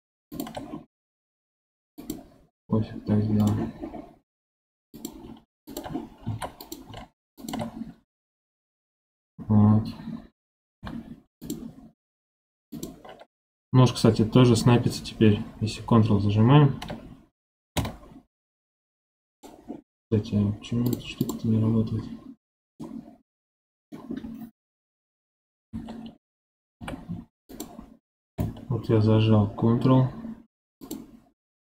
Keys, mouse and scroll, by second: 1.4 ctrl+r, 3.3 right click, 4.2 ctrl+r, 6.2 ctrl+r, 10.7 k, 20.8 click, 22.7-25.5 middle drag, 25.5 KP_7, 26.7 k.